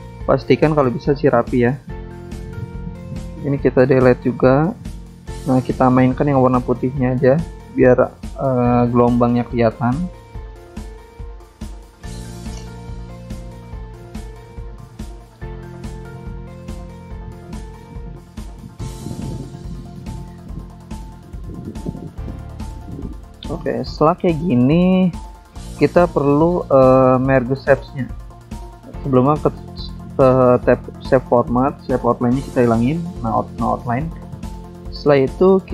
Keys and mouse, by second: 1.5 click, 2.3 click, 5.0 right click, 5.7 click, 6.9 click, 8.1 click, 9.6 click, 12.5 click, 13.8 click, 15.1 ctrl+z, 15.9 click, 17.4 click, 18.8 click, 20.3 click, 21.3 ctrl+z, 22.2 click, 22.8 click, 23.9 double click, 25.7 click, 27.1 click, 27.1 click, 29.4 click, 30.2 click, 30.9 click, 32.6 click, 34.4 click.